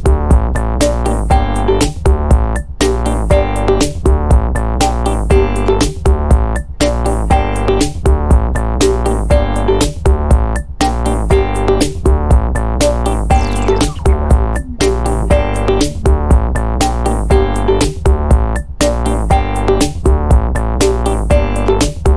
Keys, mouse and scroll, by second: 3.5 ctrl+click, 3.9 ctrl+click, 4.3 ctrl+right click, 5.4 click, 6.2 click, 7.0-8.5 drag, 8.6-12.2 drag, 12.2 0, 13.7 click, 14.7 click, 15.3 click, 16.9-18.8 drag, 19.0 click, 19.8 click, 20.2 click, 20.8-22.1 drag.